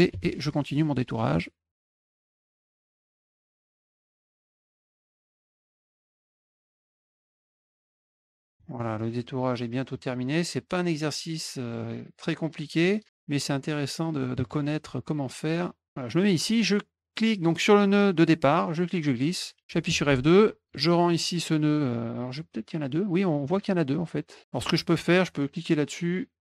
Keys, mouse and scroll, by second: 0.3 middle click, 1.7 click, 1.8 click, 2.0 click, 2.0 middle click, 2.1 click, 2.3 click, 2.4 click, 2.5 click, 2.6 click, 2.7 middle click, 2.8 click, 2.9 click, 3.0 middle click, 3.1 click, 3.2 middle click, 3.3 drag, 3.4 middle click, 3.5 click, 3.6 middle click, 3.7 drag, 3.8 middle click, 4.1 click, 4.3 click, 4.4 middle click, 4.5 click, 4.7 middle click, 4.8 click, 5.3 middle click, 5.7 click, 5.9 click, 6.1 middle click, 6.3 click, 6.5 click, 6.7 click, 6.8 click, 6.9 middle click, 7.1 click, 7.1 click, 7.3 middle click, 7.4 click, 7.7 click, 7.8 click, 8.0 middle click, 8.1 click, 8.2 click, 8.3 middle click, 8.4 click, 8.7 middle click, 10.0 click, 12.2-13.1 drag, 13.5 click, 15.3 click, 18.5-19.4 drag, 19.9 F2, 21.0 click, 23.5 click, 24.4 click.